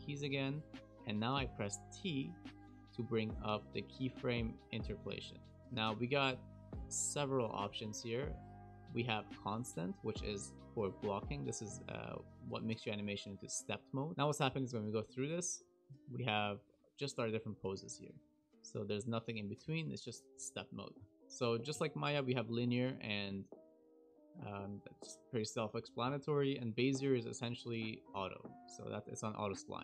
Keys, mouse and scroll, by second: 14.1 Delete, 14.1 click, 21.1 t, 21.7 t, 23.1 click, 26.0 t, 28.2 click.